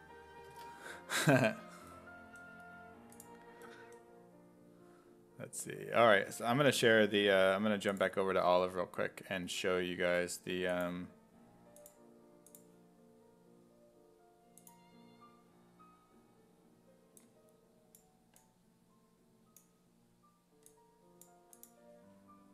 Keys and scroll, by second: 0.6 Tab.